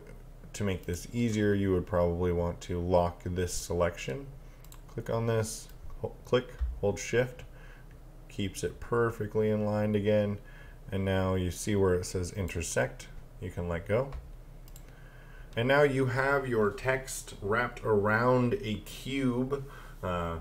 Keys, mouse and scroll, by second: 0.8 click, 3.5 click, 14.7 click.